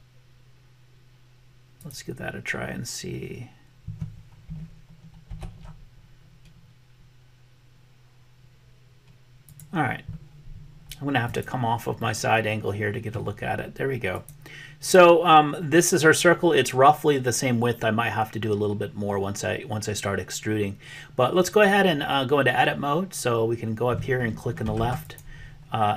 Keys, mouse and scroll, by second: 5.3 ctrl+z, 9.4 click, 11.2 click, 12.0-13.3 middle drag, 14.9 click, 25.2-25.9 drag.